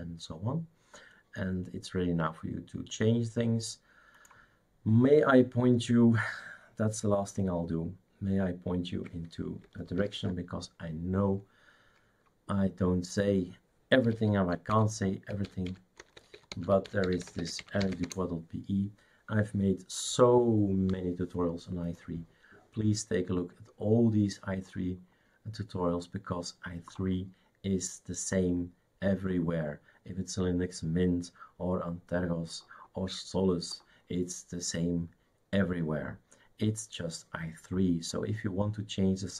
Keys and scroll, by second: 10.0 ctrl+alt+f, 13.9-18.4 typing.